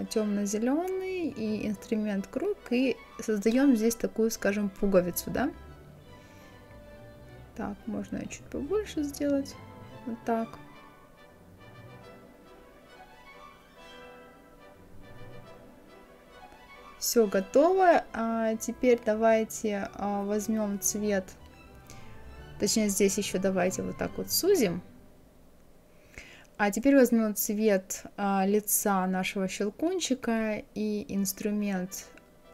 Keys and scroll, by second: 13.3 Up.